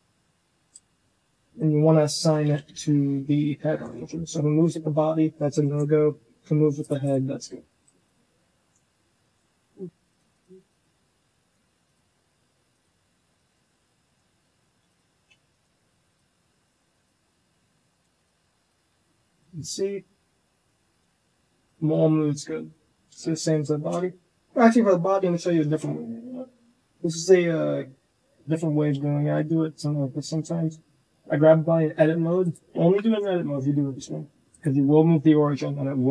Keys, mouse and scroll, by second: 2.6 alt+h, 3.6 alt+h, 4.0 g, 6.7 click, 7.1-7.9 drag, 8.4 a, 8.5 g, 10.0 click, 10.3 click, 11.1 g, 12.7 click, 13.7 g, 14.8 click, 14.9 g, 16.0-16.9 drag, 17.2 a, 17.4 g, 18.1-18.6 drag, 18.8 r, 19.3 r, 21.5 click, 22.8 shift+middle click, 22.9 shift+click, 25.5 Tab, 29.0 shift+middle click, 29.9 shift+middle click, 30.4 g, 32.9 shift+middle click, 33.3 g, 34.4 click.